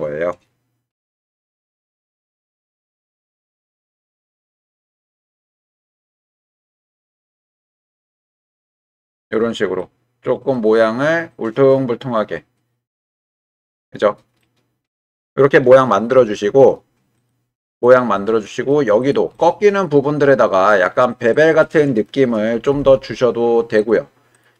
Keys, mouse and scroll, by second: 0.9 g, 2.7 click, 3.3 shift+click, 5.0 g, 5.2 y, 7.9 click, 8.6 Tab, 9.8-10.5 drag, 13.0 Tab, 14.4-15.5 middle drag, 17.2 click, 17.8 middle click, 19.0 click, 19.3-20.8 middle drag, 21.6 middle click, 22.7 g, 22.8 x, 23.8 click.